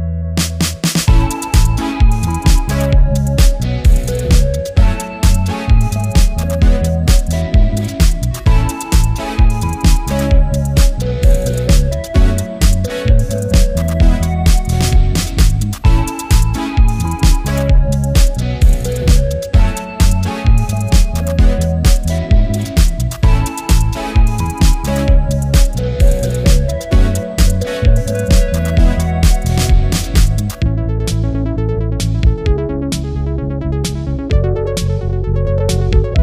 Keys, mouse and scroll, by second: 2.5 ctrl+z, 16.7 ctrl+z, 18.2 ctrl+z, 21.4 ctrl+z, 22.8 ctrl+z, 24.2 ctrl+z, 28.7 ctrl+z, 31.5 ctrl+z, 32.9 ctrl+z, 35.7 ctrl+z.